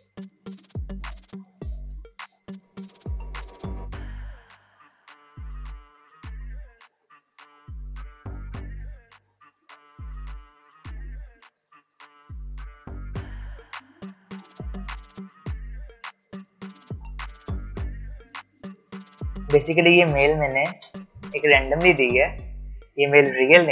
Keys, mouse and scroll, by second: 2.3-7.5 typing, 9.4-11.6 typing, 12.6-14.6 typing, 15.8-17.5 typing, 18.8-20.5 typing.